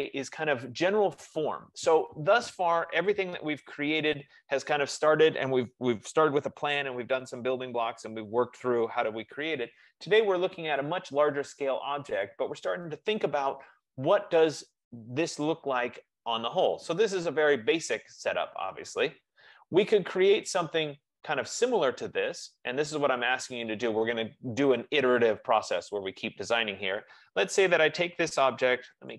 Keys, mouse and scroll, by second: 11.0 click, 12.3 click, 17.3 click, 18.7 F15, 22.3 scroll, 23.0 scroll, 28.5-29.1 typing.